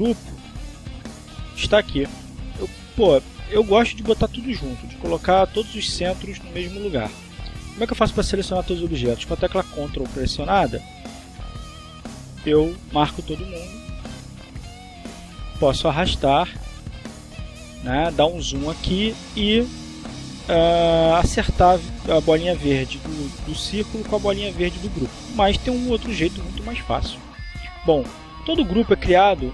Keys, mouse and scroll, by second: 0.1 click, 8.4 click, 11.5 ctrl+click, 12.5 click, 14.1 click, 15.8-19.3 drag, 26.7 ctrl+z, 28.4 click.